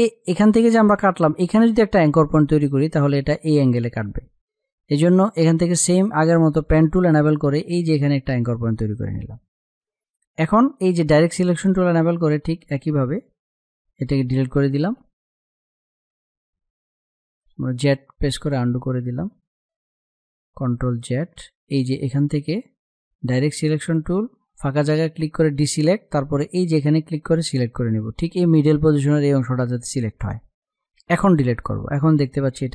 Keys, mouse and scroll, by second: 5.8 click, 10.4 click, 14.2 Delete, 16.8-19.8 typing, 17.0 click, 18.1 click, 18.7 click, 21.4 space, 21.6 click, 21.9 space, 22.4 click, 30.4 Delete, 32.6 space.